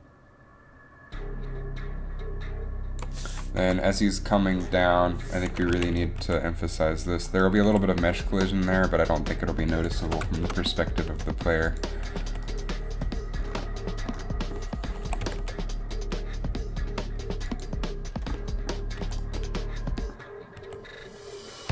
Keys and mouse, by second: 3.7 Up, 5.9 a, 6.4 r, 7.8 r, 11.4 r, 12.2 r, 15.2 r, 15.3 r, 18.8 r, 19.1 r, 20.7 r, 20.9 r.